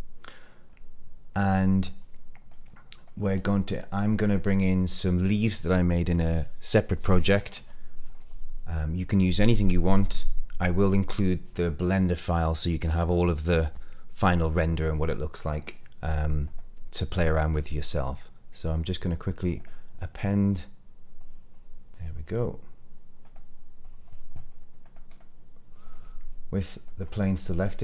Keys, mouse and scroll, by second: 0.6 middle click, 1.4 middle click, 2.4 click, 3.3 click, 16.4-19.6 drag, 24.7 click, 25.0 click, 25.0 scroll down 2, 26.1 middle click.